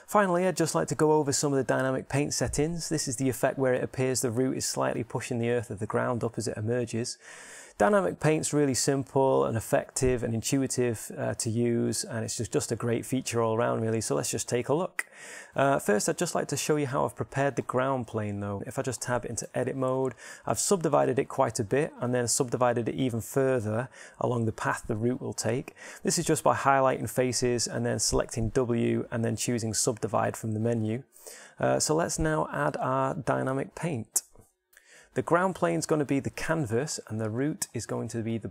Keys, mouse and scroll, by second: 18.6-20.1 middle drag, 20.1 Tab, 21.1 middle click, 29.3 w, 32.9 Tab.